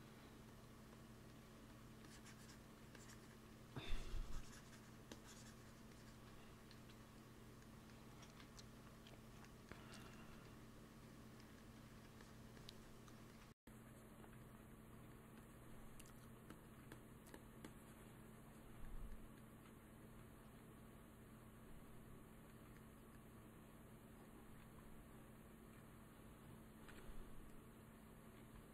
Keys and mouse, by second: 0.4-7.6 drag, 1.5 f, 6.6 KP_1, 8.3 ctrl+s, 10.8 f, 11.8 f, 12.1-19.4 drag, 13.1 f, 14.9 f, 19.9 ctrl+s, 24.5 ctrl+s, 26.8 KP_1, 28.3 ctrl+s.